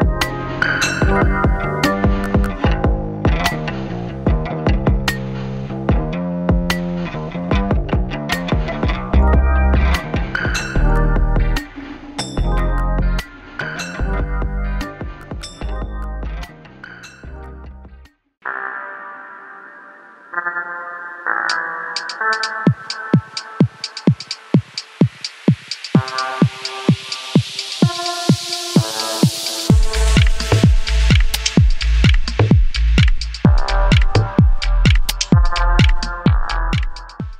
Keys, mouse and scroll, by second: 0.6 ctrl+z, 1.1-10.6 drag, 10.6 Insert, 12.2 Delete, 13.7-15.8 scroll up 1.